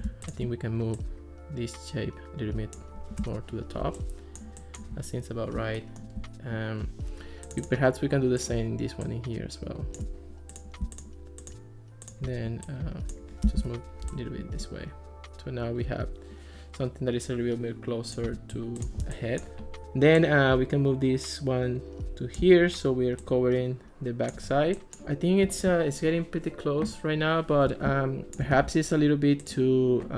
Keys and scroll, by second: 3.2 Escape, 13.5 Escape, 27.9 ctrl+s, 28.6 ctrl+x.